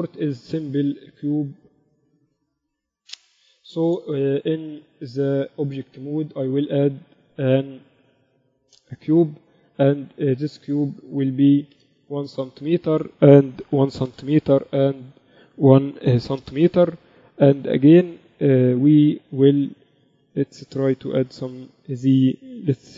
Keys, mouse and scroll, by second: 6.1 shift+a, 10.4 n, 11.2-13.0 drag, 13.6-15.3 drag, 15.9-17.7 drag, 20.9-22.9 drag.